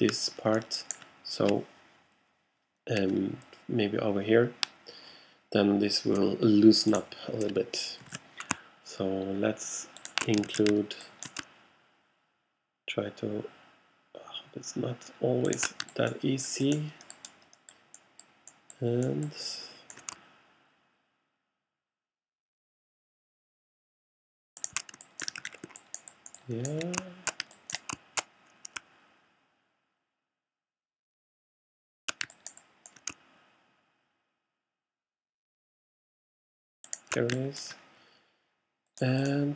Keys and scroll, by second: 7.8-8.6 typing, 10.5 shift+super+z, 11.4 alt+super+z, 25.5 alt+shift+super+z.